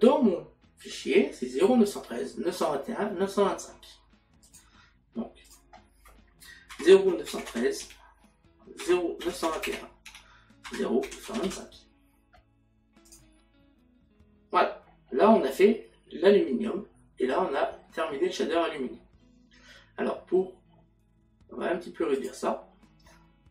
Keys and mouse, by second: 6.7 KP_Decimal, 7.8 KP_3, 10.1 Tab, 10.8 KP_Decimal, 13.1 click, 17.8 middle click.